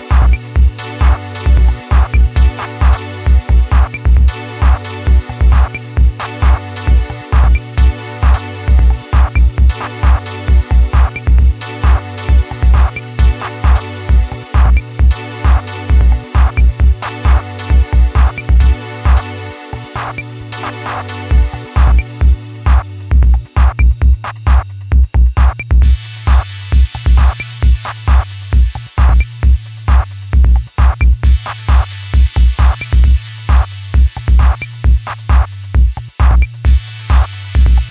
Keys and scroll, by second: 1.4 ctrl+KP_Subtract, 1.8 ctrl+KP_Subtract.